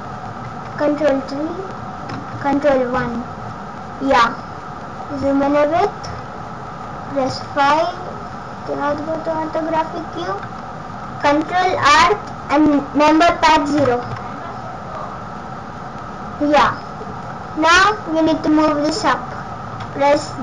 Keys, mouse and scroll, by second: 0.4 ctrl+KP_3, 2.2 ctrl+KP_1, 4.2-6.0 scroll up 10, 6.0 scroll down 5, 7.3 KP_5, 9.8 scroll up 2, 10.5-10.9 scroll down 1, 15.8-16.6 scroll down 6, 16.5-17.3 scroll up 5.